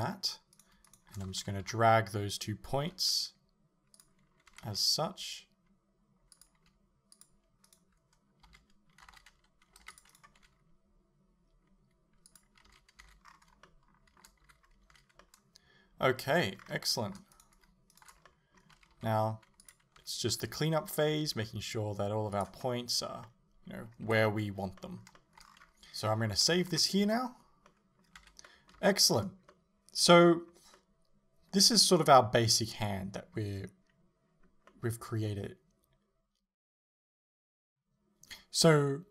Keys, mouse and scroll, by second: 0.6 right click, 0.9 shift+right click, 1.7 KP_7, 2.9 g, 4.1 click, 4.6 r, 6.7 g, 7.3 click, 7.7 right click, 8.5 z, 9.1 a, 10.0 c, 10.4 g, 12.4 click, 12.7 z, 13.1 a, 13.3-13.7 scroll down 2, 13.7-17.4 shift+middle drag, 14.5 a, 14.7 scroll down 2, 14.9 a, 16.6-17.4 scroll up 2, 17.4 right click, 18.0 shift+right click, 18.3-20.1 middle drag, 18.8 g, 20.1 r, 20.6 right click, 20.9-22.5 middle drag, 21.5 r, 22.5 click, 22.7-26.9 middle drag, 24.1 a, 25.5-26.7 scroll down 2, 26.9 click, 27.7-39.1 middle drag, 28.2 Tab, 28.8 a, 29.1-29.5 scroll up 2.